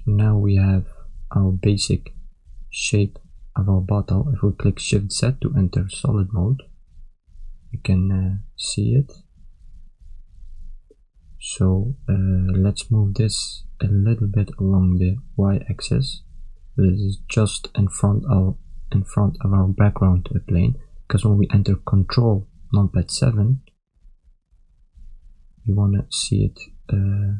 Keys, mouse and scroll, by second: 1.7 shift+middle click, 2.7 ctrl+middle click, 3.5 shift+middle click, 5.5 shift+z, 6.3 ctrl+middle click, 8.8 shift+middle click, 10.7 Tab, 11.6 KP_3, 12.7 ctrl+middle click, 13.3 shift+middle click, 14.7 click, 20.2 KP_1, 22.3 ctrl+KP_7, 23.3 ctrl+middle click, 24.8 KP_1, 25.6 shift+middle click, 26.7 shift+z, 27.2 ctrl+middle click.